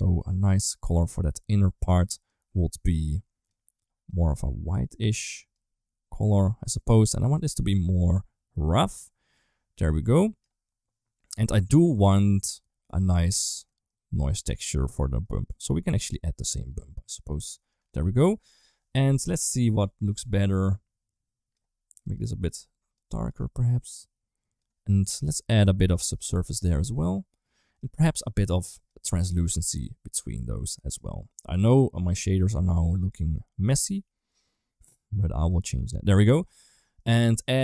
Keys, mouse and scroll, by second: 7.2-9.1 drag, 9.8 click, 11.7 click, 13.1 middle click, 13.5 middle click, 14.2 middle click, 14.9 middle click, 15.7 click, 18.2 ctrl+s, 18.9-21.4 drag, 21.8 click, 25.7 click, 26.5-27.6 drag, 27.9 middle click, 28.5 click, 29.1 shift+d, 30.5 middle click, 31.2-31.7 drag, 32.0 click, 32.6 click, 32.7 click, 33.4 click, 34.0-35.2 drag, 35.6 middle click, 36.5 middle click, 37.4 click.